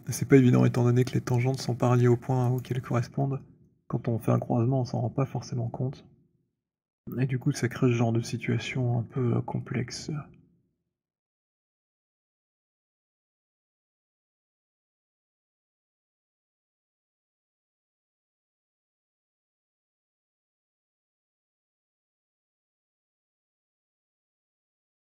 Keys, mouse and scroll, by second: 2.5 alt+click, 3.5 alt+middle click, 4.2 alt+right click, 4.6 alt+click, 6.7 alt+click, 7.4 alt+click, 8.4 middle click, 9.1 alt+middle click, 12.5 alt+click, 13.4 alt+right click, 14.5 alt+click, 16.6 alt+click, 17.5 click, 20.9 click, 23.0 alt+click, 23.5 alt+click, 23.5 alt+right click, 24.7 alt+click.